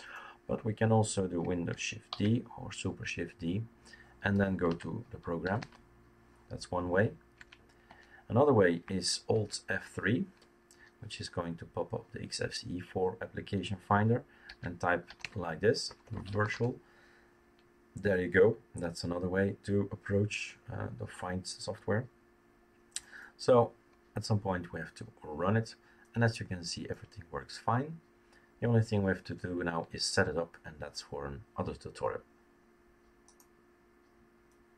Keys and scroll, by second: 2.1 shift+super+d, 4.6-6.1 typing, 7.3 Escape, 7.8 Escape, 9.3 alt+F3, 14.8-17.0 typing.